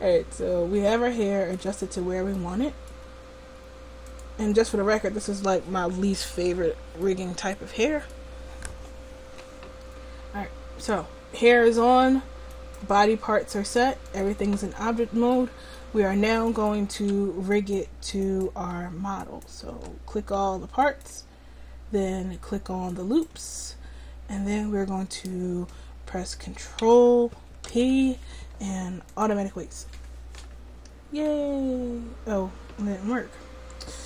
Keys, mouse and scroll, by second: 2.1 middle click, 4.1 click, 5.2-6.4 drag, 7.1-10.7 middle drag, 10.7-13.2 drag, 13.3 right click, 14.3-15.6 drag, 14.9 middle click, 14.9 right click, 16.6-20.0 right drag, 20.0-22.9 drag, 22.9-27.7 right drag, 27.7 ctrl+p.